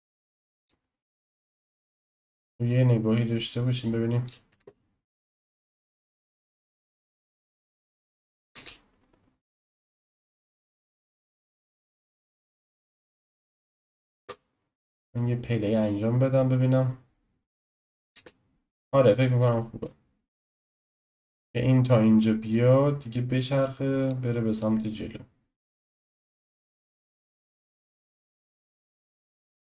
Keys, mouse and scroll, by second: 2.2-4.5 drag, 4.5 space, 8.5 space, 9.5 click, 11.0 click, 12.9-14.2 drag, 14.2 space, 18.1 space, 19.8-23.0 drag, 23.6-24.6 drag, 26.4 click, 27.9-29.4 shift+middle drag, 29.4 drag.